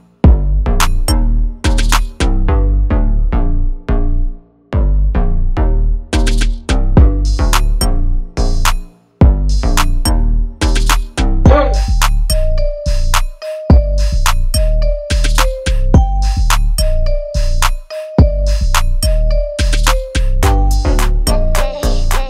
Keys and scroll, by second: 8.6 KP_2, 8.7 KP_0, 9.2 Return, 11.4 ctrl+z, 15.8 KP_1, 15.9 KP_5, 16.4 Return.